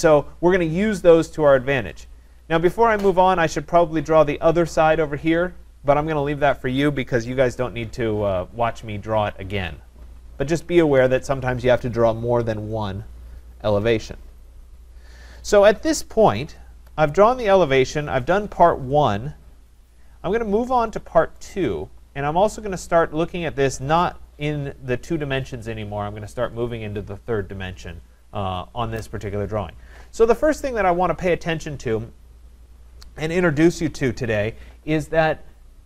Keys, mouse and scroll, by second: 1.5 scroll, 2.5 scroll, 10.3 scroll, 10.4-15.5 middle drag, 30.5 click.